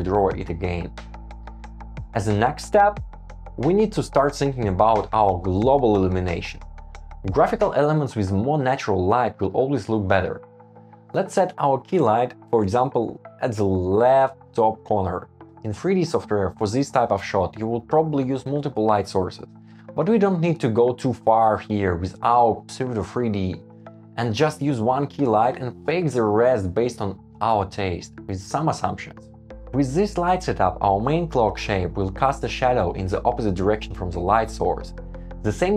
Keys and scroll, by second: 0.1 Escape, 0.8 Return, 1.2 Escape, 1.6 Return, 1.7 Escape, 1.9 Escape, 13.3 shift+Up, 14.8 Escape, 15.5 shift+Right, 15.9 shift+Down, 16.3 shift+Right, 16.5 shift+Down, 16.9 shift+Right, 18.6 shift+Up, 19.4 shift+Down, 20.3 shift+Right, 21.1 shift+Left, 21.3 shift+Up, 22.2 Up, 23.8 shift+Up, 25.0 super+s.